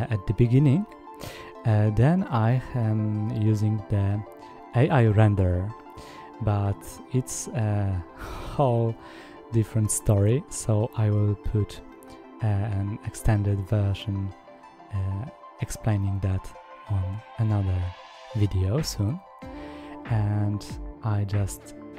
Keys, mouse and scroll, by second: 0.3-1.7 drag, 3.1 click, 3.5-4.3 drag, 4.4 click, 4.8 drag, 4.9-5.5 scroll down 1, 5.7 click, 7.9-9.0 drag, 9.9-10.3 scroll down 1, 10.3 drag, 10.5 scroll down 1, 11.9 click, 18.7 click, 19.4 click, 20.5 click, 20.7-21.2 scroll down 1.